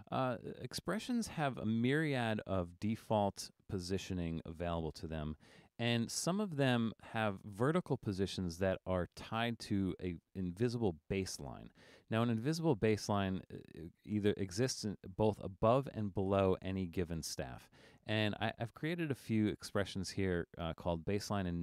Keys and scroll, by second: 5.6 super+-.